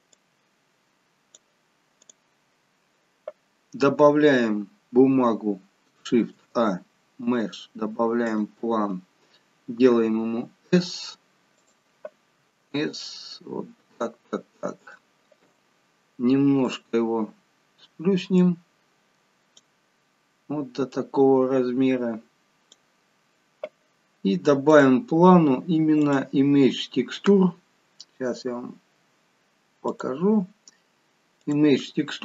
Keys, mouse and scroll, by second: 1.9 click, 3.4-4.4 scroll down 5, 6.2 shift+a, 9.7 s, 12.3 s, 16.6 click, 18.3 click, 20.8 click, 24.6 click, 26.0 click, 29.8 click.